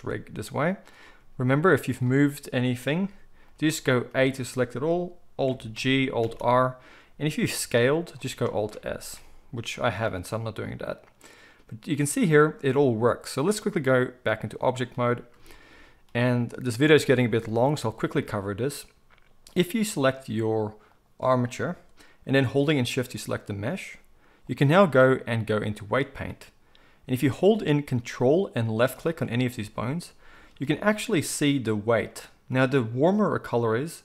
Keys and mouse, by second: 1.2 r, 2.6 click, 2.9 g, 4.1 a, 5.8 alt+g, 6.2 alt+r, 7.5 s, 8.7-13.5 alt+middle drag, 8.9 alt+s, 13.5-21.0 drag, 21.0-22.9 middle drag, 22.9 shift+click, 23.0-24.5 shift+middle drag, 24.5-28.8 drag, 28.8-34.0 ctrl+middle drag.